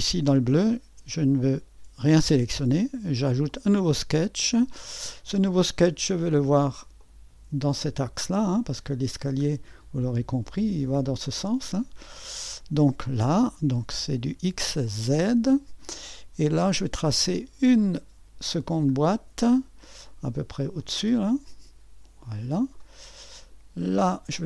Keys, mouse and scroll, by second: 0.0-3.1 drag, 3.5-4.8 drag, 4.8-5.5 scroll down 1, 6.5-11.8 drag, 11.8-14.8 scroll down 1, 14.8-16.2 drag, 16.2-17.7 scroll up 1, 17.7-24.4 drag.